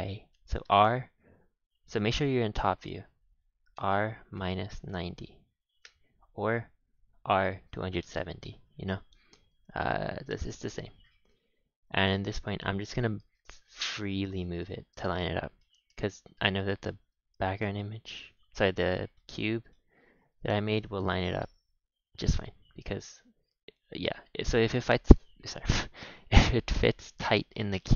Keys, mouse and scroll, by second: 0.6 r, 3.7 r, 8.1 shift+middle click, 8.6 g, 9.8 g, 12.1 z, 12.8 scroll up 2, 13.2 g, 14.7 scroll up 5, 15.0-16.0 shift+middle drag, 16.0 g, 17.5 g, 18.6-20.3 shift+middle drag, 20.3 g, 22.3 shift+middle click, 22.9 scroll down 4, 23.1-23.7 shift+middle drag, 23.7 scroll up 4, 24.1-24.7 middle drag, 25.1-26.4 scroll down 5, 26.4-27.9 shift+middle drag, 27.9 scroll up 2.